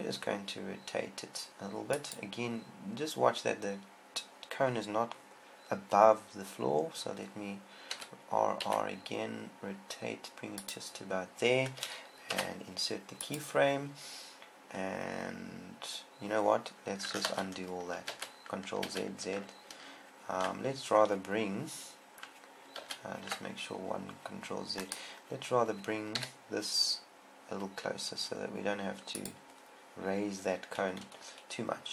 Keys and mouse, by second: 8.5 r, 11.1-12.7 drag, 12.7 i, 18.1 ctrl+z, 18.5 ctrl+z, 19.3 ctrl+z, 24.3 ctrl+z, 26.7 g, 29.8-31.5 drag.